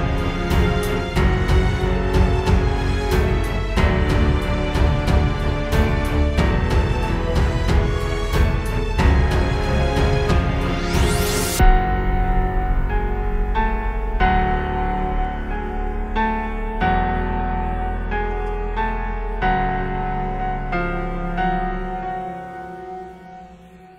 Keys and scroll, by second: 4.5 space, 5.1 space, 5.5 space, 12.3 space, 13.0 space, 14.9 space, 15.4 alt+super+space, 16.0 super+space, 17.6 space, 18.1 space, 21.7 super+z.